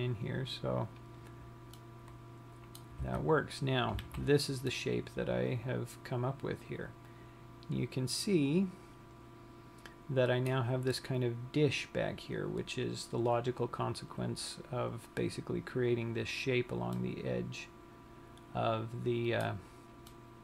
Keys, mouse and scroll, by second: 1.8 click, 2.3 middle click, 3.5 Tab, 4.2 scroll down 1, 4.5 z, 5.0 middle click, 17.4 middle click.